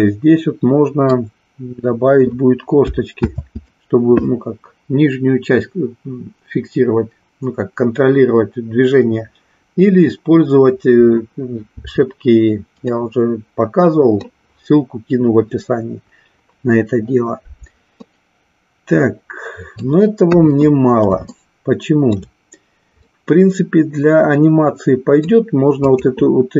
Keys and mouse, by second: 0.0-1.1 middle drag, 3.2 ctrl+z, 12.8-14.2 middle drag, 18.1-20.0 middle drag, 20.2 KP_1, 21.3-22.3 shift+middle drag, 23.0-25.2 middle drag, 25.8-26.5 drag.